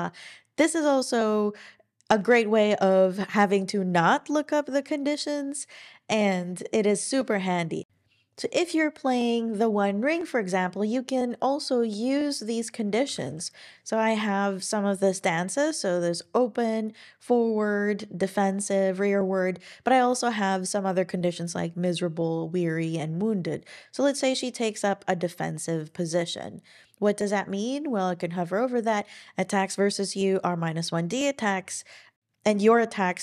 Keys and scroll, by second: 13.0-13.7 typing.